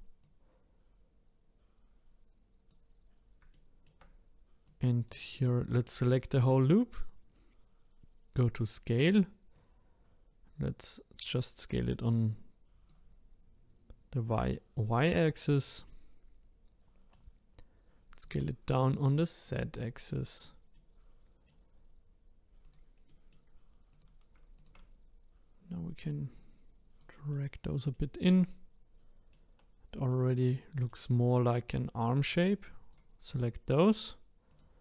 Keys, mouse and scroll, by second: 0.2 click, 3.5-4.6 shift+middle drag, 4.6-7.7 drag, 8.3-9.8 drag, 15.8-18.2 middle drag, 18.2 click, 20.7-22.6 middle drag, 22.6 click, 23.1 middle click, 23.9 click, 24.5 shift+click, 25.7 click, 27.3-32.2 middle drag, 32.2-34.8 drag.